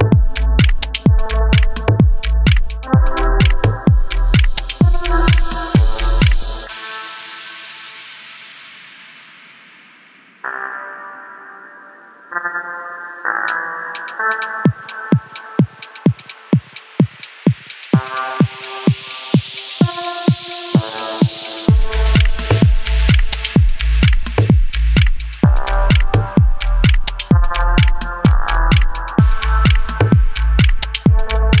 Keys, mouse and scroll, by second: 0.1 middle click, 0.2 scroll up 4, 0.4 click, 0.5 middle click, 0.6 ctrl+r, 0.8-1.3 middle drag, 1.3 click, 1.7 shift+drag, 1.8 f, 1.9-2.2 middle drag, 2.2 drag, 2.5 click, 2.6 middle drag, 2.7 shift+drag, 2.8-10.8 typing, 2.9 middle drag, 3.4 click, 3.5-3.9 middle drag, 3.9 shift+drag, 4.1 shift+click, 4.3 click, 4.4 middle drag, 4.6 ctrl+z, 4.8 middle drag, 5.0 drag, 5.2 shift+drag, 5.3 shift+click, 5.5 middle drag, 5.8 middle drag, 6.0 shift+drag, 6.2 middle click, 6.4 shift+middle drag, 6.7 middle drag, 7.0 middle click, 7.6 alt+click, 8.3 shift+middle click, 8.9-9.3 scroll down 2, 10.2-10.7 scroll down 5, 10.2 shift+middle drag, 10.7 click, 10.7 scroll up 1, 10.7 middle click, 11.0 middle click, 11.2 Tab, 11.3 middle click, 11.6-12.6 drag, 12.6-13.0 middle drag, 13.0 shift+scroll up 1, 13.1 middle click, 13.2 KP_3, 13.4 Tab, 13.5 shift+middle click, 13.6-13.9 scroll up 2, 14.0 alt+click, 15.1 shift+d, 15.3 s, 15.5 middle drag, 15.8 scroll up 1, 16.1-16.5 middle drag, 16.5 click, 16.7 middle click, 16.9-24.4 typing, 17.4 middle drag, 17.8 click, 18.3 middle click, 18.6 middle click, 18.7 scroll up 1, 18.8 click, 18.8 middle click, 19.1 middle click, 19.2 click, 19.7 middle click, 20.3 middle drag, 20.6 Tab, 21.0 middle click, 21.2 scroll up 3, 21.5 alt+shift+drag, 21.6 shift+middle click, 23.9-24.4 middle drag, 24.5 click, 24.5 middle drag, 24.6 click, 24.7 middle click, 24.9 shift+click, 25.0-25.5 middle drag, 25.5 drag, 25.6 shift+click, 25.7 f, 25.8 click, 25.9 middle drag, 26.1 shift+click, 26.2 f, 26.2 middle drag, 26.4 middle drag, 26.6 shift+click, 26.9-27.3 shift+middle drag, 27.3 shift+click, 27.3 f, 27.5 middle drag, 27.8 shift+click, 27.9 f, 28.0 a, 28.2 scroll down 4, 28.4 alt+shift+click, 28.6-29.1 shift+middle drag, 29.1 scroll down 1, 29.3-31.6 typing, 29.3 click, 29.4 shift+middle click, 29.5 scroll up 1, 29.8 click, 29.8 middle click, 30.2 shift+middle click, 30.4 click, 30.5 click, 30.8 scroll up 3, 30.8 shift+middle click, 31.3 click.